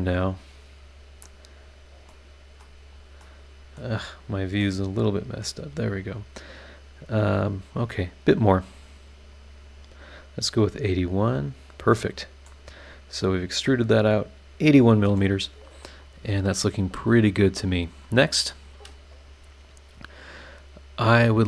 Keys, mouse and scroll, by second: 2.1 right click, 2.1 scroll up 2, 2.9-4.3 drag, 3.2 middle click, 3.4 right click, 4.3 right click, 4.6-5.6 middle drag, 4.7 right click, 5.7-6.0 scroll up 1, 7.4 click, 8.6 click, 9.3 click, 11.2 click, 11.9 middle click, 12.0 click, 12.0 right click, 12.6-13.1 scroll down 2, 13.1 scroll up 2, 13.6-15.3 middle drag, 13.7-15.3 right drag, 16.0 click.